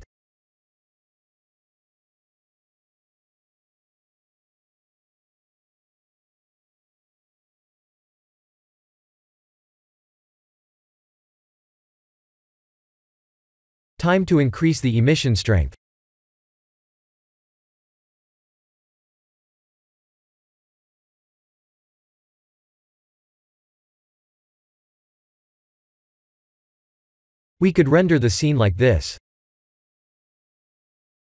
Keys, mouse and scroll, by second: 0.0-1.0 drag, 1.6-3.0 drag, 3.1 click, 4.1-5.9 drag, 10.5 click, 12.4 click, 13.6 click, 14.0 click, 15.1 click, 16.3 click, 17.5-19.6 drag, 21.5 click, 21.9 click, 23.1 click, 25.4 click, 28.8 click, 30.9 scroll up 4.